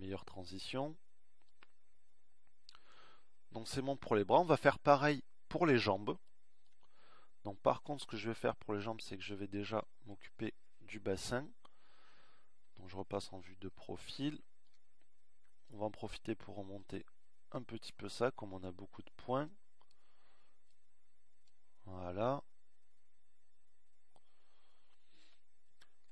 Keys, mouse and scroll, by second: 13.5 KP_3.